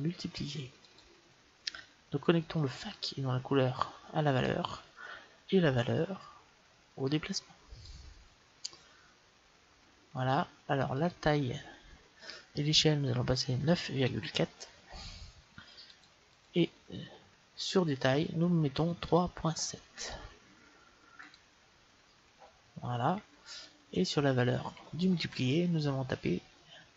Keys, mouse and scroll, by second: 2.7-4.5 drag, 5.7-7.4 drag, 10.8-12.8 drag, 16.4-18.1 drag, 23.5-25.3 drag.